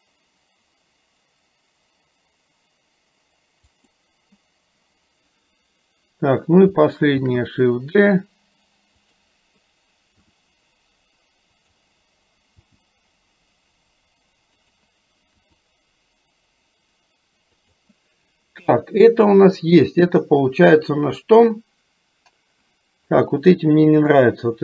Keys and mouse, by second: 7.3 shift+d, 10.4 r, 12.7 g, 15.5 r.